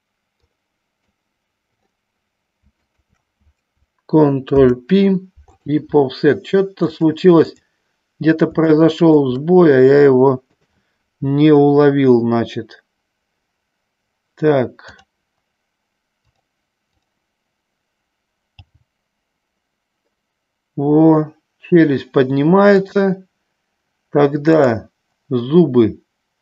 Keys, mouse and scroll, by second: 0.4 click, 3.0 shift+click, 4.7 ctrl+p, 7.1 click, 8.9 shift+middle click, 10.7 click, 15.1 click, 16.5 click, 23.0 click.